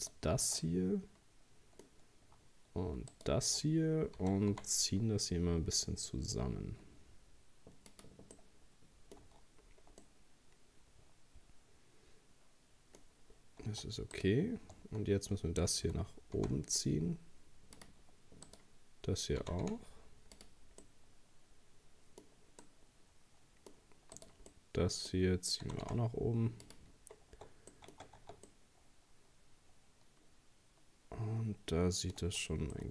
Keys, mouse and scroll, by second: 0.0 alt+shift+right click, 0.6-3.1 middle drag, 3.1 alt+shift+right click, 4.2 s, 8.4 middle click, 9.3 Tab, 9.7-10.0 scroll down 3, 10.0-13.0 middle drag, 13.0-13.7 scroll up 3, 13.7 Tab, 14.2 right click, 15.9 g, 18.5 right click, 19.4 g, 20.8-24.2 middle drag, 24.2 right click, 24.5-25.7 middle drag, 25.7 g, 27.0 scroll down 1, 27.3 Tab, 27.4 Tab, 27.7 middle click, 28.2 Tab, 28.5-31.5 middle drag, 32.7-32.9 shift+middle drag.